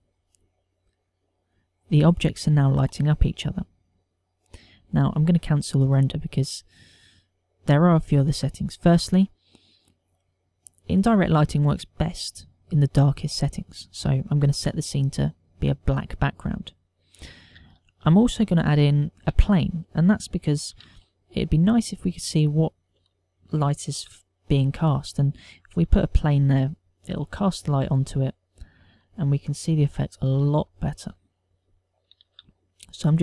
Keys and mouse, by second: 8.9 click, 11.0 click, 13.0 click, 18.4 KP_7, 19.3 ctrl+middle click, 19.8 shift+middle click, 20.5 ctrl+middle click, 21.8 shift+a, 24.7 g, 26.1 click, 27.3 s, 27.6 click, 28.0 s, 29.8 click, 30.6 KP_1, 31.6 ctrl+middle click, 33.0 g.